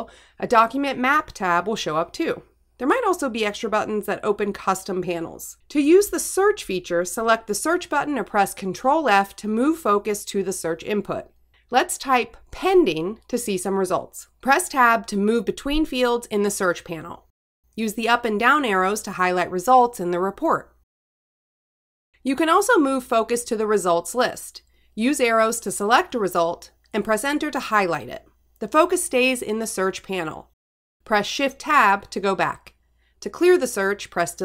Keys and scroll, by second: 10.9 ctrl+f, 17.1 Tab, 20.8 Return, 23.5 Tab, 24.4 Down, 26.0 Return, 28.8 Down, 29.5 Return, 32.8 shift+Tab.